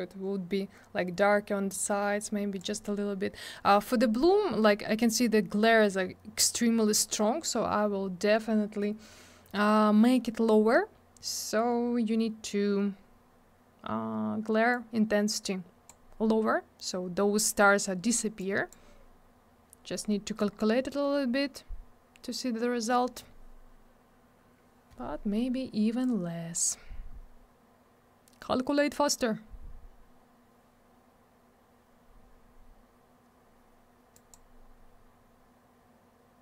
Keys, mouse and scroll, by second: 4.7-5.0 scroll up 1, 7.1-7.5 scroll down 1, 14.7 click, 18.4 click, 20.5 scroll up 1, 26.0 click, 34.1 click, 34.3 click.